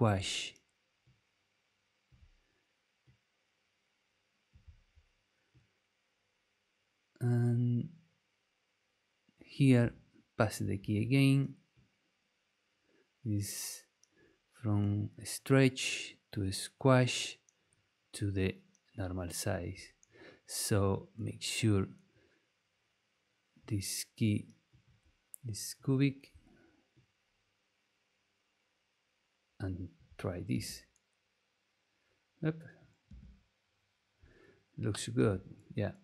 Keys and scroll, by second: 10.6 super+v, 30.5 space, 33.0 space, 35.1 space.